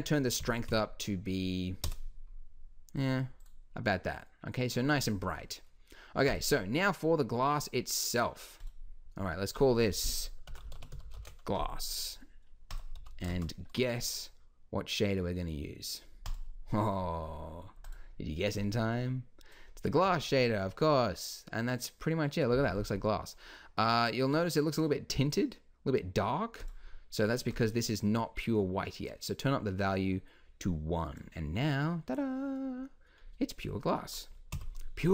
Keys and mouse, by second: 3.9-4.9 drag, 11.0 s, 13.0 x, 13.3 shift+a, 18.6-20.4 drag, 20.4 middle click, 26.6-30.1 drag, 30.1 middle click, 32.1 middle click, 34.5 KP_1.